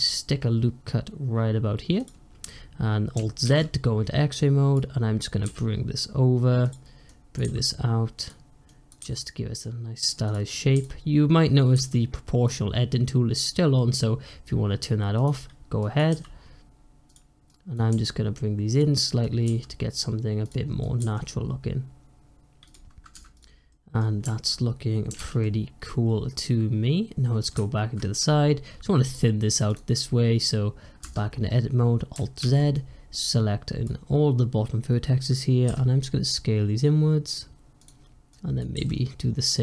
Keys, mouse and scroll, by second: 3.3 alt+z, 4.2 click, 5.3 g, 6.9 click, 7.3 g, 8.6 click, 8.9 g, 10.4 click, 11.6 g, 15.1 click, 15.7 click, 16.0 g, 17.4 click, 17.8 g, 19.1 click, 19.4 g, 20.7 click, 20.9 g, 23.0 Tab, 23.2 click, 23.6 middle click, 23.9-25.1 scroll down 1, 25.1 alt+z, 25.3-27.4 middle drag, 27.4 `, 28.1-28.9 scroll up 5, 29.6 click, 29.8 scroll down 1, 30.1-30.9 scroll up 1, 30.9 Tab, 32.3 alt+z, 32.6 click, 35.6 s, 38.2 click, 38.6 s.